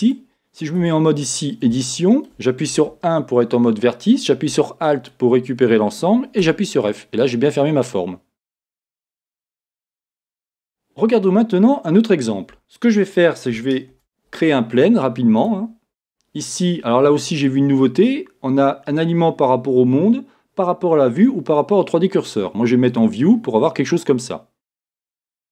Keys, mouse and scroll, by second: 0.1 click, 0.8 Tab, 1.8-5.1 shift+middle drag, 5.1 alt+click, 7.3-12.6 middle drag, 8.7-9.4 scroll down 1, 12.6 KP_1, 15.5 shift+a, 23.0-25.5 drag.